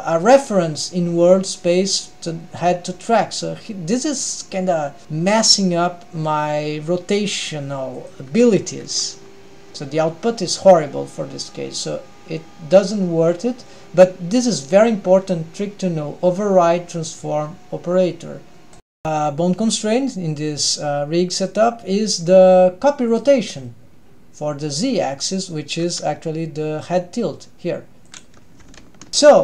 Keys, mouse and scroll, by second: 2.1 middle click, 2.8 g, 19.0 ctrl+alt+shift+super+r, 21.5 click, 22.2-23.0 scroll up 2, 23.0 click, 25.3 click, 25.8 r, 29.1 ctrl+alt+shift+super+r.